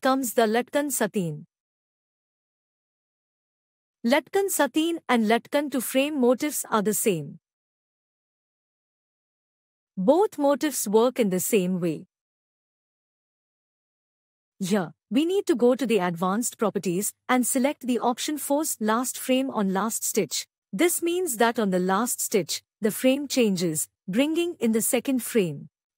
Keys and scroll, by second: 13.6 ctrl+e, 16.6 ctrl+Tab.